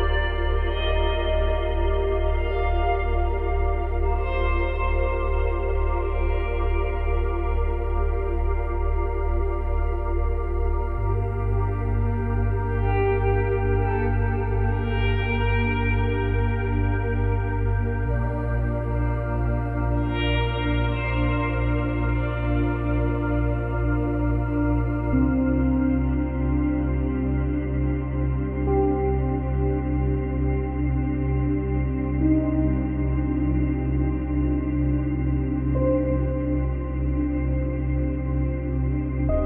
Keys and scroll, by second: 15.6 ctrl+z, 30.8 ctrl+z.